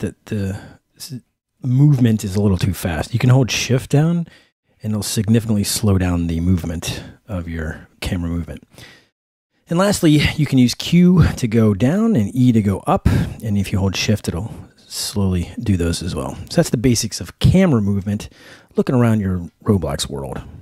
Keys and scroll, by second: 0.9-2.8 typing, 4.0 shift+w, 5.7 shift+a, 7.4 shift+a, 11.4 q, 12.2 e, 14.0-16.2 typing.